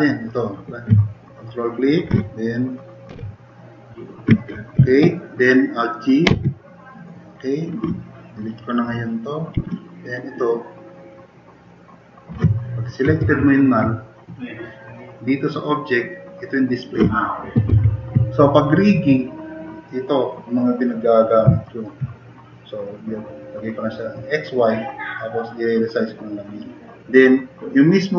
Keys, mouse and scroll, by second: 3.1 ctrl+shift+e, 6.3 alt+g, 9.6 Delete, 13.3 super+=, 18.0 super+=, 21.6 drag.